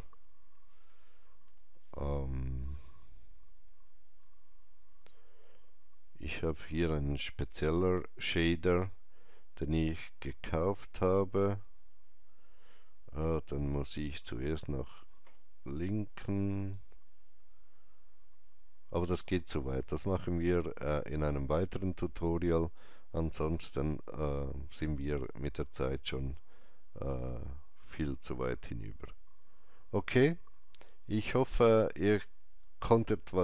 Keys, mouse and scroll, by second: 1.3 Delete, 4.1 shift+a, 16.5 Delete, 16.5 click, 16.5 shift+a, 19.7 click, 19.7 shift+a, 24.2-27.4 drag.